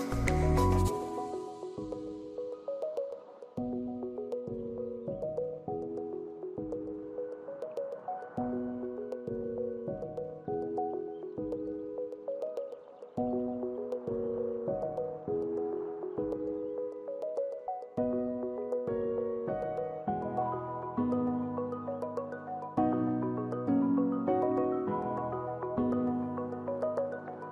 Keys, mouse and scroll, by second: 6.8 ctrl+c, 6.8 ctrl+v.